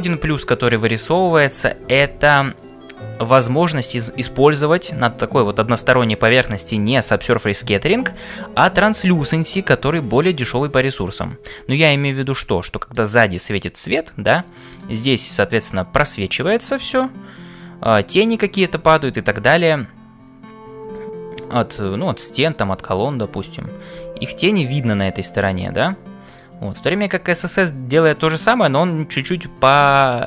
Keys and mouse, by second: 11.8-13.0 middle drag, 14.4 middle click, 17.6 middle click, 25.5 middle click.